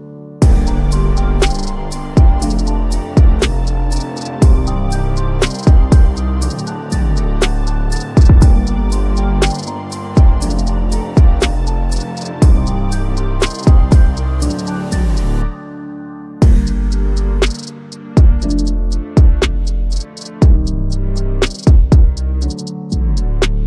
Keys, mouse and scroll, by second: 0.3-1.6 typing, 2.1 click, 4.4 click, 6.2 ctrl+d, 7.2-8.3 drag, 9.4 s, 10.5 click, 10.8-11.7 typing, 11.9 click, 13.2-13.9 drag, 16.0 ctrl+z, 17.5 click, 18.8-21.4 drag.